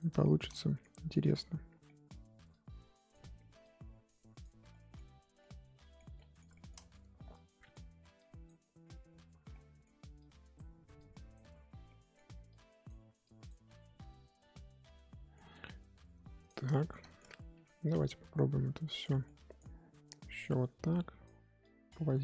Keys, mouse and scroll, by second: 0.2-1.4 shift+middle drag, 1.4-1.8 scroll up 1, 1.8 middle click, 2.5-4.7 drag, 4.7-7.0 middle drag, 7.0 scroll up 1, 7.3-9.5 drag, 9.5 middle click, 10.1-11.8 drag, 11.8 middle click, 12.4-13.6 drag, 13.6-16.4 middle drag, 16.4 click, 16.7 shift+middle click, 17.3 scroll up 2, 17.5 f, 18.0-19.1 drag, 19.1 middle click, 19.3-22.2 drag.